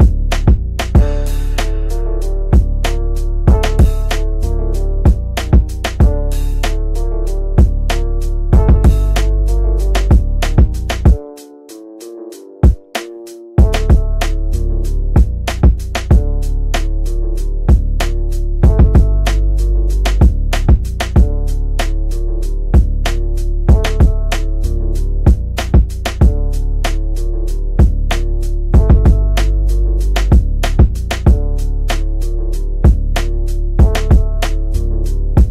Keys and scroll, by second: 2.2 F3, 4.0 shift+F2, 7.9 ctrl+z, 22.3 ctrl+Page_Down, 25.2 Escape.